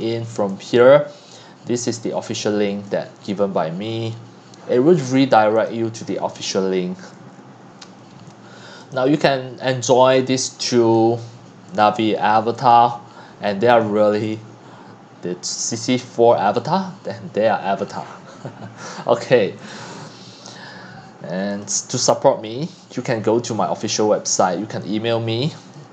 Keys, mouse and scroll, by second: 0.0-7.3 drag, 7.3-8.1 scroll down 5, 8.1-8.9 scroll up 8, 8.9 click, 9.6-10.0 scroll down 8, 10.0-10.4 scroll up 5, 10.4 x, 10.7 c, 11.0-12.4 drag, 12.9-14.4 drag, 20.3 click, 21.6-25.9 drag.